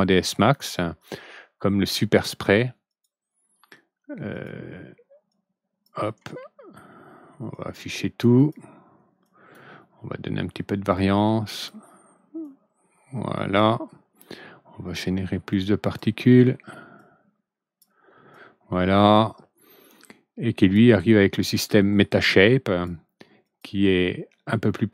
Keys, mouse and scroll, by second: 0.3 click, 1.9 middle click, 2.8 click, 4.2 click, 5.2 click, 7.4 click, 8.3 click, 9.2 drag, 10.8 click, 12.4-13.5 drag, 15.4 click, 16.9 click, 18.2 click, 20.5 click, 22.0 click, 23.4 click.